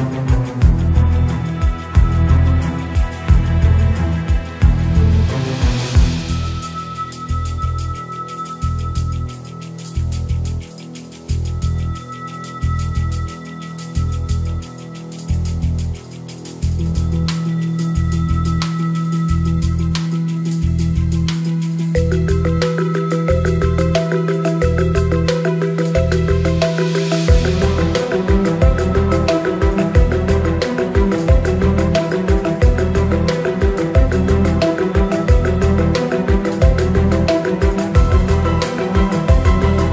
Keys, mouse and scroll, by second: 1.1 KP_7, 2.6 g, 5.5 g, 8.9 shift+a, 10.8 middle click, 11.6 g, 13.0 click, 13.1-14.4 drag, 14.1 r, 15.4 ctrl+4, 16.7 click, 17.3 Tab, 18.1 1, 18.3 click, 19.3 g, 20.9 click, 21.3 g, 24.1 Tab, 25.6 click, 26.1 click, 26.9 click, 28.1 s, 29.1 KP_1, 29.8 g, 30.6 g, 32.8 shift+click, 33.1 g, 34.4 shift+click, 34.8 g, 38.1 KP_3, 39.1 click.